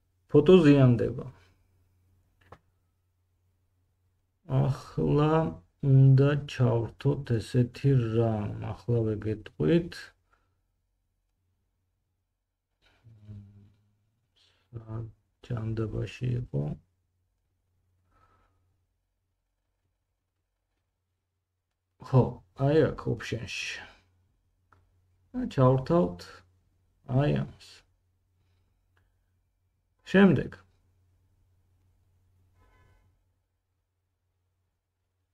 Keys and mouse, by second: 3.5 middle click, 3.5 right click, 7.1-8.0 drag, 10.6-14.8 drag, 17.8-19.5 drag, 21.2-24.0 drag, 32.0-35.3 drag, 33.4 g.